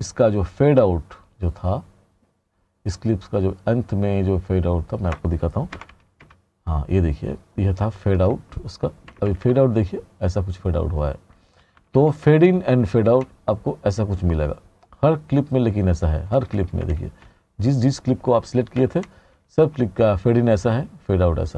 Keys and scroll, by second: 5.8 r, 7.1 r, 9.1 t, 11.6 r, 16.4 t, 18.8 r.